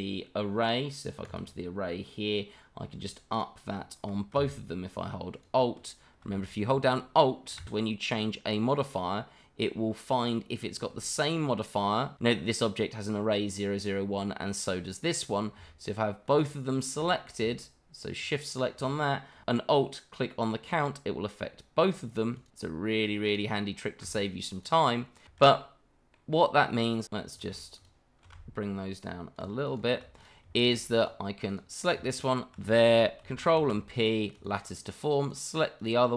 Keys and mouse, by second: 5.3 alt+click, 6.5 shift+middle drag, 7.0-7.4 middle drag, 8.1 alt+click, 10.2 alt+click, 12.3 click, 15.0 click, 16.3 shift+click, 17.0 click, 18.2 shift+click, 20.7 alt+click, 22.3 alt+click, 22.6 alt+click, 23.5 alt+click, 24.5 click, 24.7-25.1 middle drag, 25.2 shift+middle drag, 25.6-26.1 middle drag, 27.0 ctrl+z, 27.3 click, 27.7 shift+click, 29.3 alt+click, 29.6 alt+click, 30.2 click, 30.5 shift+middle drag, 31.0 click, 31.5 click, 32.1 shift+click, 33.7 ctrl+p, 35.2 click, 35.8 click.